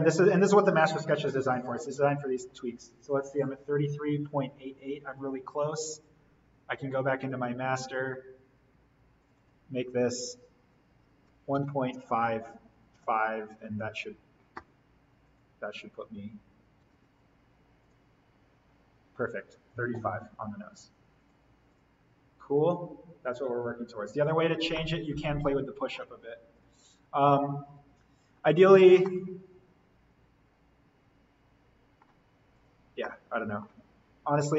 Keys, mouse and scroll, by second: 0.0 click, 5.0 click, 7.1 right click, 7.8 click, 11.2-13.5 typing, 13.4 click, 17.0 alt+l, 17.8 click, 21.1 click, 24.7-26.5 middle drag, 26.5 click, 28.0 alt+v, 28.6-28.9 scroll up 1, 29.0-32.5 middle drag, 32.5 click, 32.9 scroll up 1, 33.0 middle click, 33.9 scroll down 1.